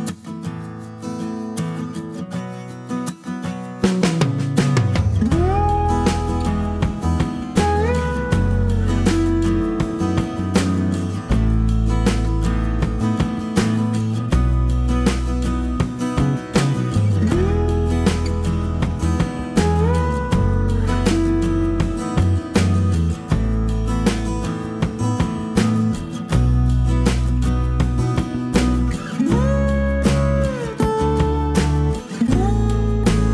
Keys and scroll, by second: 0.8 g, 2.6 Delete, 3.0 ctrl+z, 4.7 Delete, 5.1 ctrl+z, 7.5 Delete, 11.6-12.2 typing, 14.2 typing, 18.2 space, 19.5-20.1 typing, 29.8 F7, 30.9-32.4 typing.